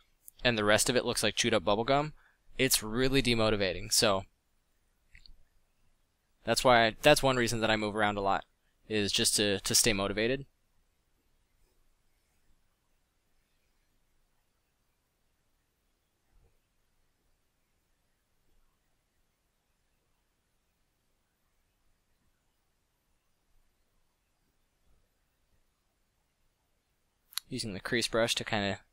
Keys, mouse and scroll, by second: 21.9 f, 27.5 f.